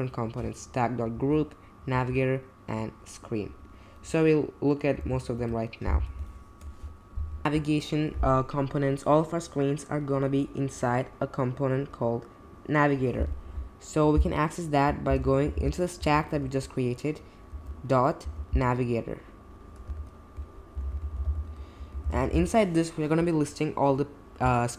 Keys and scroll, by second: 1.1 Down, 1.6-2.4 typing, 5.0 BackSpace, 5.3 Return, 14.8-17.5 typing, 19.9 super+z, 20.5-22.0 typing, 22.3 Return.